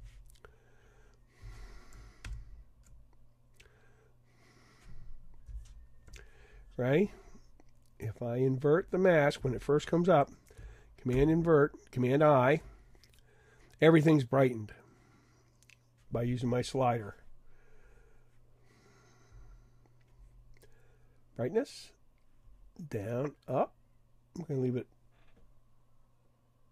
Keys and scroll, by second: 2.2 super+0, 11.1 super+i.